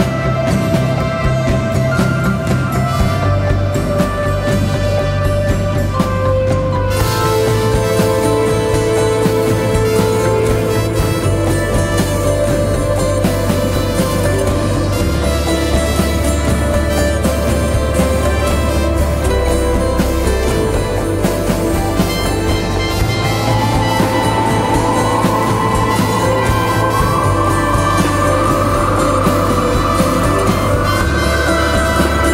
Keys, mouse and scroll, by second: 1.2-5.2 scroll down 1, 26.1 double click.